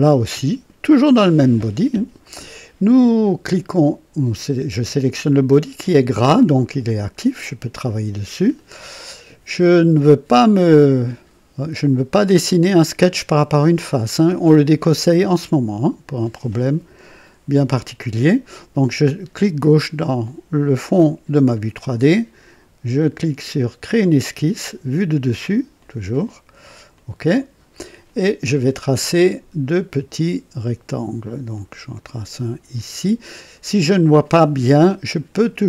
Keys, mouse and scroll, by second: 1.7 click, 10.4 click, 19.5 click, 23.8 click, 25.7 click, 26.9 click, 29.6 click, 31.5 click, 32.7 click.